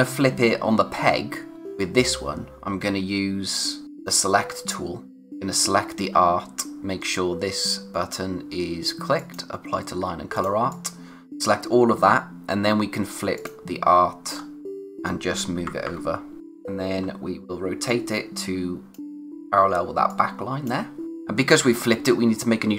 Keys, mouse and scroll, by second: 1.5 click, 3.9 click, 9.2 click, 14.4-15.2 scroll up 1, 15.6 Right, 16.4 scroll up 1, 17.9 click.